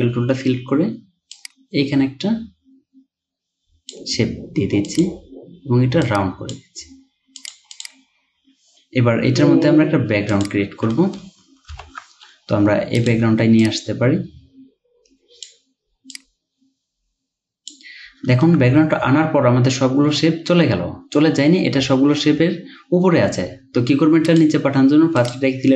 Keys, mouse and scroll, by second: 7.8 double click, 13.1 ctrl+alt+2, 18.4-21.4 ctrl+scroll down 1.